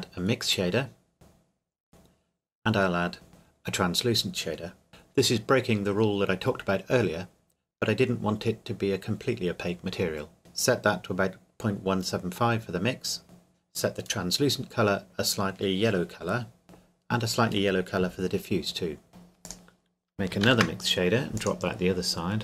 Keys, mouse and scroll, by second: 2.3 click, 7.4 click, 12.5 click, 13.2 KP_Enter, 13.5 click, 16.6 middle click, 17.7 click, 19.4 click, 20.5 shift+d, 21.4 click.